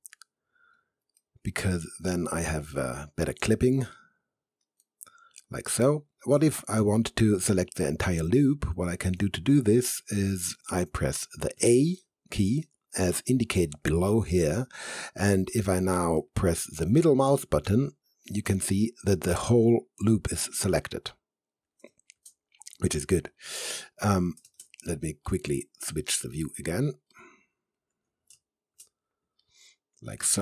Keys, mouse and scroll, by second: 0.5 click, 1.2 alt+middle click, 1.8 alt+right click, 2.7 alt+middle click, 4.0 alt+right click, 4.9-6.2 alt+middle drag, 9.1 alt+right click, 9.2-11.6 alt+right drag, 11.6 a, 14.8 a, 15.5 right click, 15.6 a, 16.2 middle click, 17.3-19.3 typing, 18.3 middle click, 20.5 typing, 20.7 alt+click, 21.9 space, 22.1 z, 22.9 alt+click, 23.5 alt+middle click, 24.5 space, 24.6 h, 25.3 alt+right click, 25.9 alt+click, 26.4 alt+middle click, 27.1 alt+right click, 28.3 space, 28.7 z, 29.5-30.4 alt+right drag.